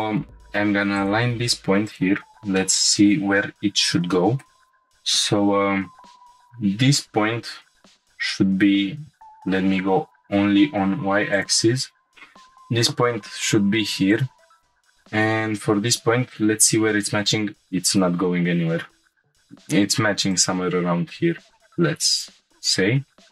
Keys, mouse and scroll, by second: 0.9 ctrl+click, 1.8 click, 2.6-3.1 shift+middle drag, 3.6 scroll up 2, 4.1 shift+middle click, 6.3 g, 8.9 y, 11.3-15.1 drag, 15.1 g, 15.3 z, 16.3 y, 17.9 right click, 20.3-22.2 drag, 22.8-23.2 scroll down 4.